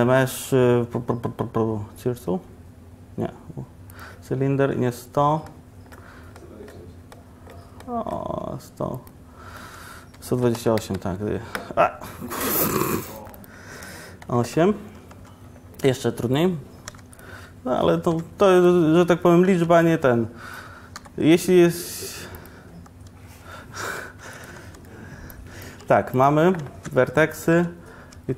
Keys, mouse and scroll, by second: 15.2 Tab, 17.0 4, 18.2 4, 18.2 3, 19.6 3, 21.4 i, 23.5 s, 24.8 s, 25.9-28.2 typing.